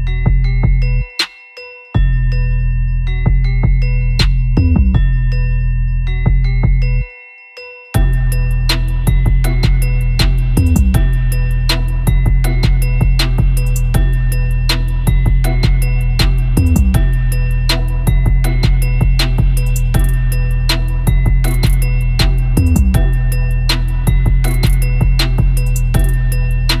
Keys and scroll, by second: 0.0-0.8 typing, 2.7 super+e, 3.3 super+e, 5.5 super+u, 8.2 super+z, 8.4 super+Tab, 9.4 space, 10.1 space, 11.9 super+e, 12.6 super+u, 13.0 Return, 15.4 super+Tab, 16.6 super+Tab, 22.4 super+u, 23.9 Return, 25.3 super+v, 25.4 super+a, 26.1 super+t, 26.2 super+;.